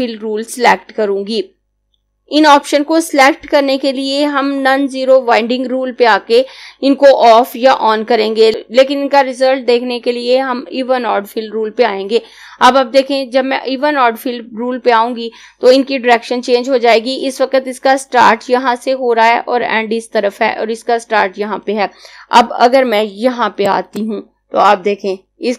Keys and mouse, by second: 23.3 click.